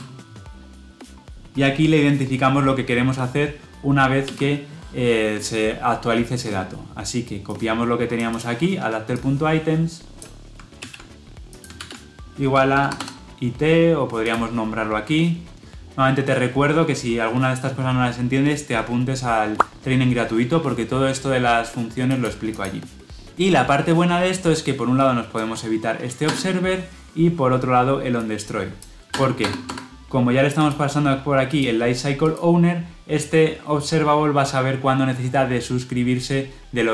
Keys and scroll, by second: 10.8 ctrl+c, 11.7 ctrl+v.